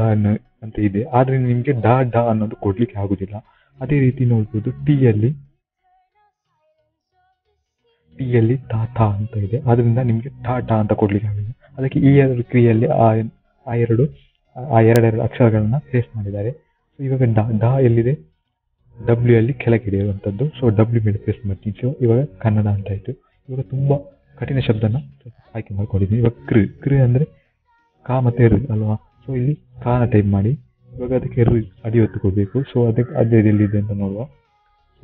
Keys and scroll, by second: 21.7-22.5 typing, 25.2 typing, 30.4 k.